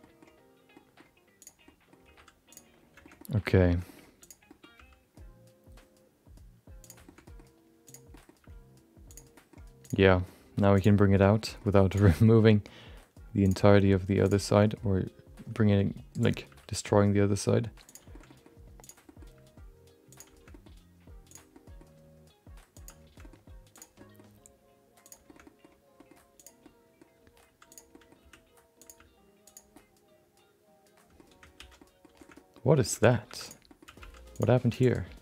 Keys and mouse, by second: 0.1 middle click, 0.8 middle click, 1.4 click, 1.6 middle click, 2.0 g, 3.0 shift+middle click, 3.3 middle click, 3.7 shift+middle click, 4.2 click, 4.4 middle click, 4.7 g, 7.1 middle click, 7.8 click, 8.1 middle click, 8.3 g, 9.8 click, 10.0 middle click, 10.3 g, 11.1 middle click, 11.3 shift+middle click, 11.5 middle click, 11.9 click, 12.2 middle click, 12.5 g, 13.6 middle click, 14.2 click, 14.4 middle click, 14.6 middle click, 14.9 g, 16.4 g, 18.2 middle click, 18.8 click, 19.0 middle click, 19.3 g, 20.5 middle click, 21.3 click, 21.5 middle click, 21.9 g, 23.2 middle click, 23.7 click, 23.9 middle click, 24.3 g, 25.4 middle click, 26.3 click, 26.6 middle click, 27.2 g, 28.0 middle click, 28.2 r, 28.9 g, 29.8 middle click, 30.5 middle click, 31.5 alt+z, 31.9 middle click, 32.4 middle click, 33.0 middle click, 33.4 click, 33.4 2, 33.6 middle click, 33.8 g, 35.0 shift+click.